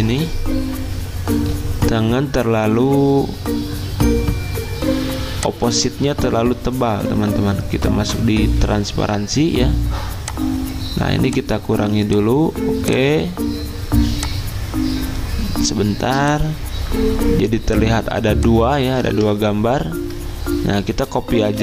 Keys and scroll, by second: 19.1 ctrl+z, 20.9 ctrl+c, 21.4 ctrl+f.